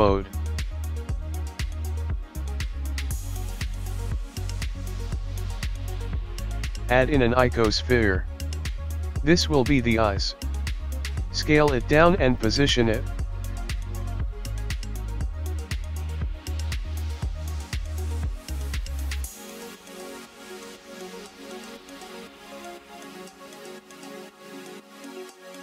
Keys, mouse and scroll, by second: 0.7 click, 1.6 click, 3.1 click, 3.1 KP_1, 4.1 shift+middle click, 5.2 click, 5.3 shift+a, 6.2 shift+a, 9.2 scroll down 4, 10.0 s, 11.0 s, 12.4 s, 13.3 scroll up 4, 14.0-14.7 scroll down 3, 14.8 KP_3, 16.2 s, 17.4 KP_1, 19.7 g, 22.1 s, 23.4 KP_7, 25.2 g.